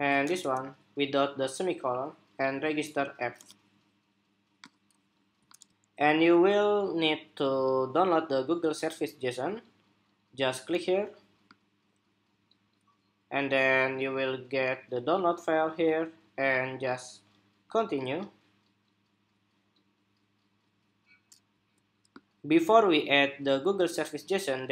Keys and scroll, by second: 21.8 shift+super+2.